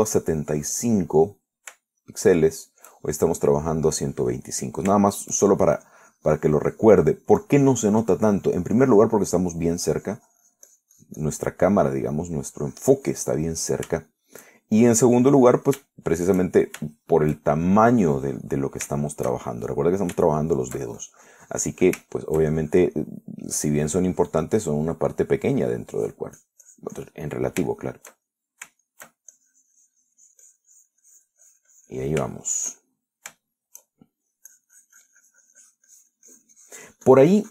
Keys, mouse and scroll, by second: 2.4 middle click, 3.2 shift+middle click, 5.7 middle click, 7.1-9.9 drag, 10.0-11.1 drag, 11.2-12.7 drag, 12.7 middle click, 13.6-14.7 drag, 14.7 middle click, 15.4 shift+middle click, 16.0-17.1 shift+drag, 17.2 shift+middle click, 18.1 shift+middle click, 18.8-19.9 shift+drag, 20.3-21.3 shift+middle drag, 21.4 shift+middle click, 22.2 shift+click, 22.5 middle click, 23.4 shift+middle click, 24.1 click, 24.4-25.8 middle drag, 25.8 click, 26.0-27.0 middle drag, 27.2 click, 27.6 click, 28.5 middle click, 29.5-30.5 shift+middle drag, 30.6-33.5 shift+drag, 33.6-34.6 shift+middle drag, 34.7 shift+middle click, 35.7-37.5 shift+drag.